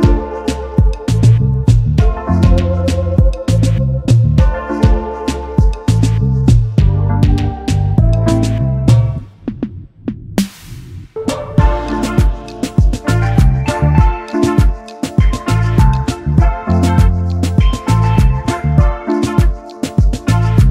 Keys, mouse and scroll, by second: 2.5 double click, 6.8 double click, 7.1 alt+scroll down 1, 7.3 space, 8.0 alt+scroll up 1, 8.2 space, 9.1 alt+scroll up 1, 9.3 space, 10.0 alt+scroll down 1, 10.2 space, 11.6 alt+scroll up 1, 12.1 alt+scroll up 1, 18.6 double click.